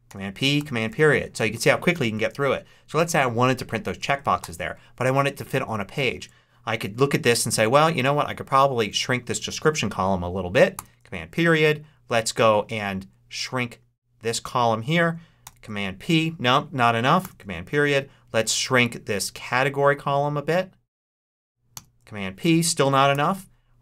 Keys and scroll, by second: 0.0 super+p, 0.5 super+., 4.3 super+p, 10.6 super+., 15.3 super+p, 17.1 super+., 21.6 super+p, 23.0 super+..